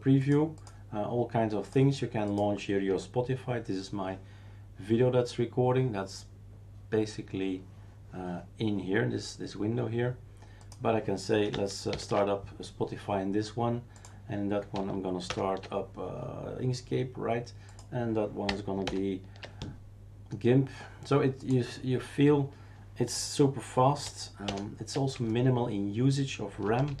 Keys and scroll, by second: 11.9 ctrl+alt+s, 15.3 super+F3, 18.8 super+F4, 24.4 super+F6, 26.9 shift+super+q.